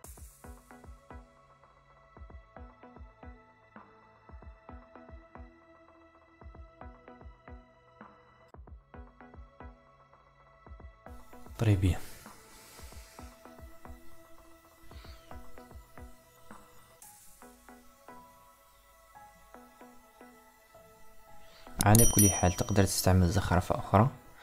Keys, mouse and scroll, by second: 8.6 click, 9.9 Delete, 11.5-13.4 middle drag, 13.6-15.4 ctrl+middle drag, 15.9 KP_7, 17.1-19.3 middle drag, 19.3 click, 20.4 Tab, 22.5 a, 24.1 r.